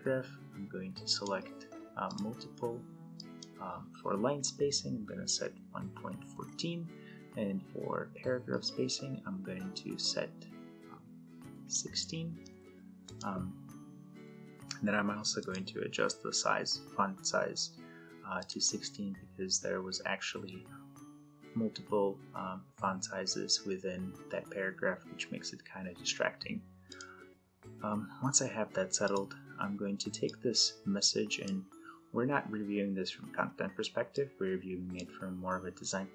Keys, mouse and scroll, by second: 4.6 click, 5.8-6.7 typing, 8.4-11.6 drag, 12.0-12.8 typing, 12.8 click, 18.1 click, 26.6-31.3 drag, 33.8-34.9 drag.